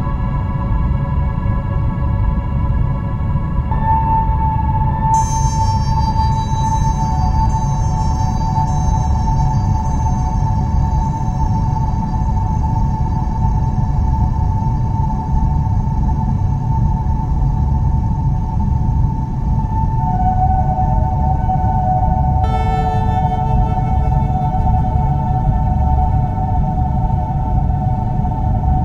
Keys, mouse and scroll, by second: 0.5-1.2 scroll down 1, 1.6 click, 2.7 scroll up 3, 3.0 scroll down 5, 3.2 scroll up 1, 3.5 click, 4.0 alt+middle click, 4.5 scroll up 4, 4.8 scroll down 2, 5.1 scroll up 1, 5.6 click, 6.2 click, 7.3 click, 9.1 click, 9.3 Delete, 9.9 click, 10.8 scroll up 1, 11.2 shift+middle click, 11.4 click, 11.8 Delete, 12.2 scroll down 3, 12.4 scroll up 1, 12.7 alt+middle click, 13.7 click, 14.6 scroll up 3, 16.0 click, 17.2 right click, 18.0 click, 22.1 click, 22.3 click, 24.0 scroll down 3, 24.4 scroll up 2, 25.4 scroll down 4, 25.5 scroll up 1, 25.6 scroll down 1, 25.8 shift+middle click, 26.6-27.0 scroll up 7, 27.0 shift+middle click, 27.3 click, 28.6 click.